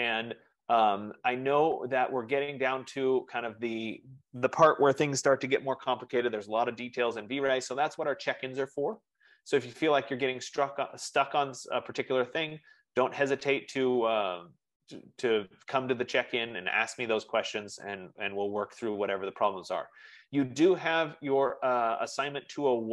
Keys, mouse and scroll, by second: 2.5-7.5 drag.